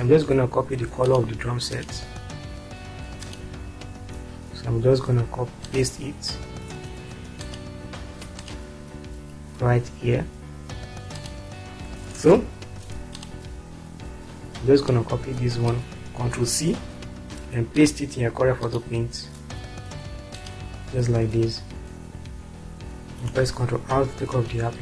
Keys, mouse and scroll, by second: 3.2 click, 7.4 click, 11.1 click, 12.2 space, 16.4 ctrl+c, 21.4 click, 21.6 click, 23.1 ctrl+r.